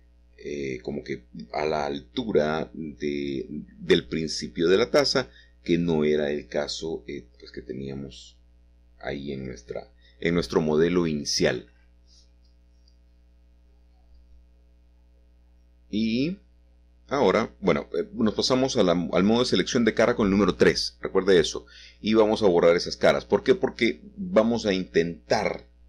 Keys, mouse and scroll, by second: 3.4 middle click, 9.4 e, 11.6 click, 12.1 middle click, 12.4 middle click, 13.1-15.3 middle drag, 17.2 a, 21.1 3, 22.0 click, 22.7 click, 23.3 shift+click, 23.7 shift+click, 24.7 shift+click.